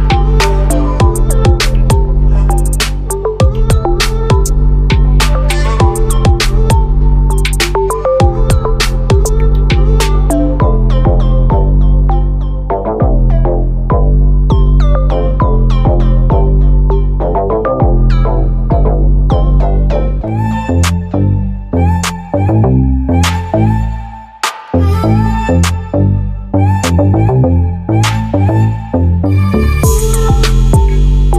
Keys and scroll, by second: 16.9 ctrl+a, 29.7 ctrl+a.